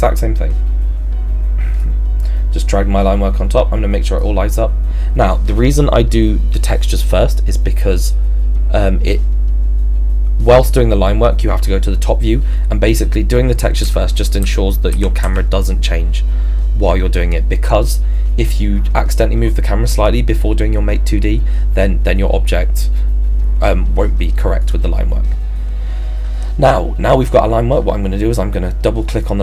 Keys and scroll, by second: 13.8 Left, 14.9 Right.